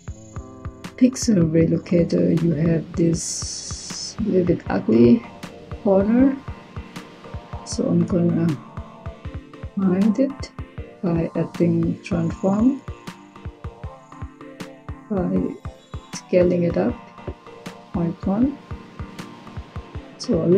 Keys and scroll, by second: 11.5-12.3 typing.